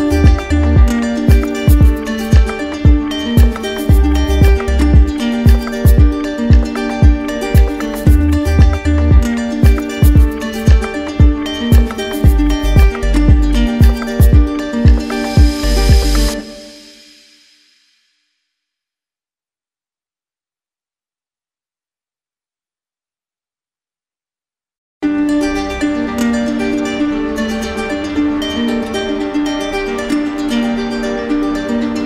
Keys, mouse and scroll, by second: 0.4 click, 4.4 click, 5.8 click, 8.2 alt+click, 8.4 ctrl+z, 12.8 click, 20.0 click, 21.0 alt+click, 22.1 alt+click, 26.2 alt+click, 27.1 right click, 28.1 alt+right click, 29.1 alt+right click, 29.3 alt+right click, 31.6 right click.